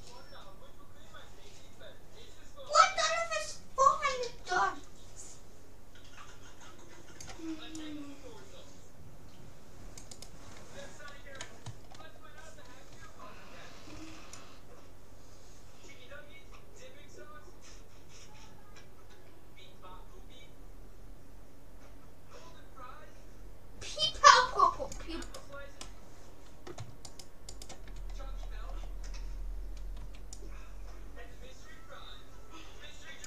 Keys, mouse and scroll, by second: 10.2-12.0 right drag, 11.8-14.6 middle drag, 14.0 c, 25.4 right click, 25.8-27.6 middle drag, 27.6-29.2 right drag, 28.4-30.4 middle drag, 30.0 c.